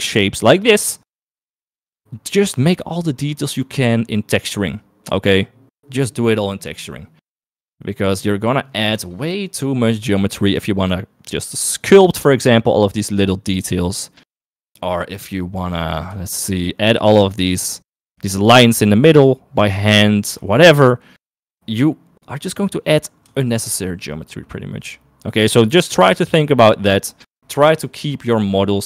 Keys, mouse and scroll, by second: 16.4 shift+middle click, 17.4 shift+middle click, 18.1 shift+middle click, 20.1 shift+middle click, 20.7 shift+middle click, 23.6 shift+middle click.